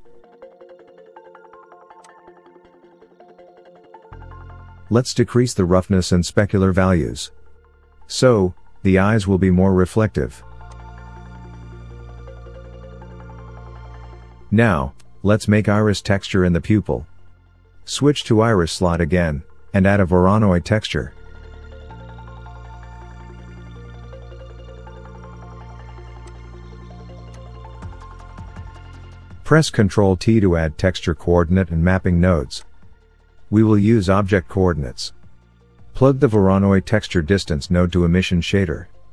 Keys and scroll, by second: 24.5 shift+a, 30.1 ctrl+t.